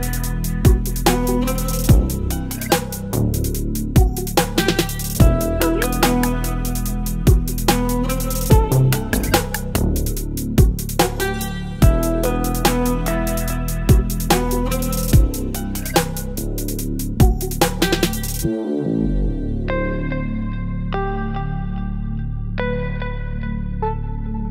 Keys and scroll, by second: 4.7 ctrl+d, 19.8 ctrl+BackSpace, 20.1 ctrl+d, 23.8 Delete, 24.2 ctrl+d.